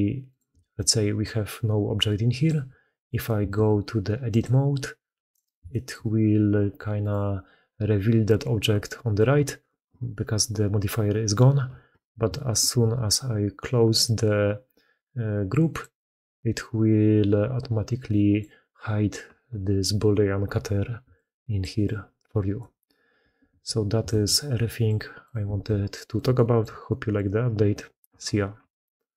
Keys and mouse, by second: 1.1 d, 1.3 d, 2.3 d, 3.0 d, 3.4 ctrl+x, 6.3 g, 8.6 d, 8.7 click, 9.0 d, 9.2 d, 12.5 ctrl+x, 17.9 click, 20.9-21.7 d, 21.0 click, 21.7 click, 22.5 d, 22.6 d, 23.1 d, 23.4 alt+a, 24.0 ctrl+x, 25.4 alt+a, 25.8 click, 26.2-26.6 shift+drag, 26.7-28.4 drag.